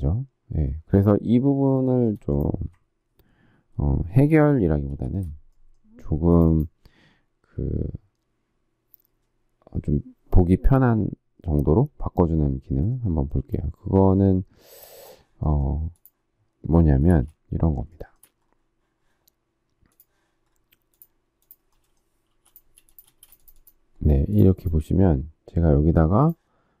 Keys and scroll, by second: 17.0 space, 22.2 p, 23.0 space.